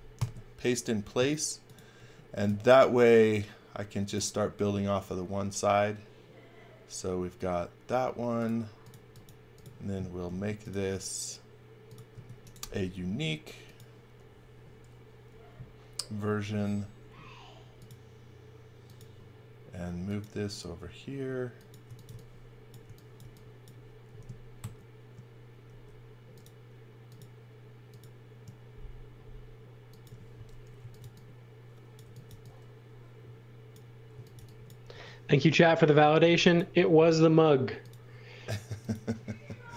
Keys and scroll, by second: 0.1 alt+shift+v, 2.0-2.9 typing, 8.1 space, 10.2 m, 12.1 space, 16.6 m, 21.6-23.2 typing, 24.6 shift+3, 25.8 m, 30.5-32.7 typing, 33.8-34.9 typing.